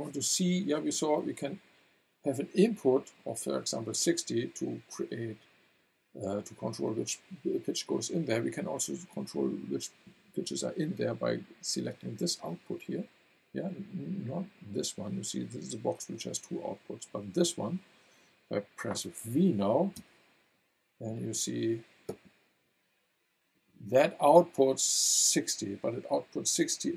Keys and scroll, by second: 19.9 v.